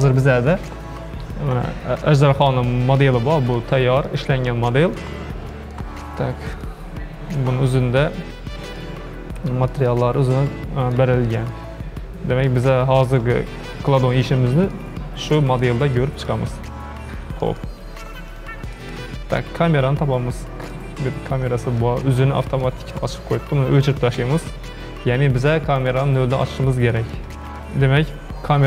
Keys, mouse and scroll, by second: 1.7-2.5 scroll up 3, 2.5-3.2 middle drag, 3.2-3.6 scroll up 1, 3.6-7.0 middle drag, 7.0 click, 7.7-9.1 middle drag, 9.1-9.5 scroll up 1, 9.5-11.0 shift+middle drag, 11.0 scroll down 1, 11.1-11.5 scroll up 1, 11.5-16.5 middle drag, 16.5-17.5 scroll down 11, 17.5 middle click, 18.4 click, 18.7-19.5 middle drag, 19.5 scroll down 4, 20.7 drag, 21.2 scroll up 3, 21.4 scroll down 3, 21.8 shift+middle click, 22.6 scroll up 1, 22.7-23.2 shift+middle drag, 23.2-24.1 scroll up 3, 24.1 x, 26.7-28.6 shift+middle drag.